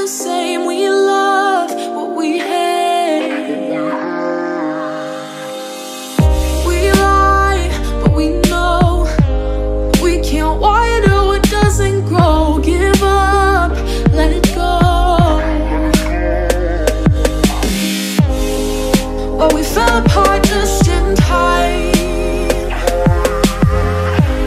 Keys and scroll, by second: 14.3 ctrl+-, 19.0 ctrl+z, 19.7 ctrl+z, 21.4 ctrl+z, 21.9 ctrl+z.